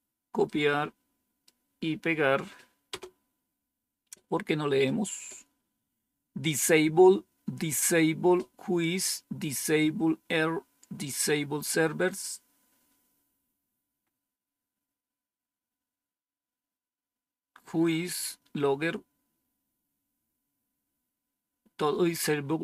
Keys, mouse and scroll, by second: 0.3-1.4 right drag, 2.8 Return, 4.7-5.7 scroll down 2, 10.9 scroll down 1, 12.1-12.8 scroll down 2, 13.9-15.7 scroll up 2, 15.7-16.5 scroll up 1, 20.6-21.4 scroll up 2.